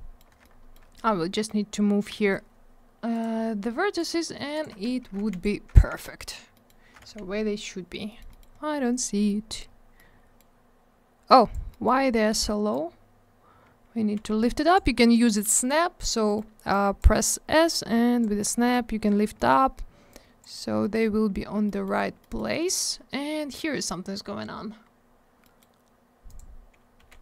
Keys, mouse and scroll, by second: 0.4 alt+middle click, 0.9 middle click, 1.6 scroll down 1, 3.1 click, 3.2 click, 3.9 click, 4.0 click, 4.5 ctrl+click, 4.6 ctrl+click, 5.2 alt+w, 5.3 right click, 5.7 alt+w, 6.0 middle click, 6.3 scroll down 1, 6.5 middle click, 6.6 double middle click, 7.0 alt+w, 8.0 middle click, 8.1 middle click, 8.2 middle click, 8.3 double middle click, 8.5 scroll up 1, 9.2 middle click, 9.6 scroll up 1, 9.9 middle click, 10.5-11.3 scroll up 1, 11.3 click, 11.5 click, 11.7 middle click, 11.8 double middle click, 11.9 scroll up 1, 12.7 click, 14.1 s, 16.2 middle click, 16.3 middle click, 16.7 click, 17.1 middle click, 17.2 middle click, 17.7 click, 18.3 scroll down 1, 18.5 middle click, 18.7 middle click, 18.8 scroll up 1, 19.3 middle click, 19.5 middle click, 19.6 scroll up 1, 20.1 click, 20.5 scroll down 1, 20.8 middle click, 20.9 middle click, 21.2-21.5 scroll up 1, 21.6 middle click, 21.8 middle click, 22.0 scroll down 1, 22.1 middle click, 22.3 middle click, 24.8-25.3 scroll up 1, 25.4 middle click, 25.5 middle click, 26.2 click, 26.3 click, 26.9 s.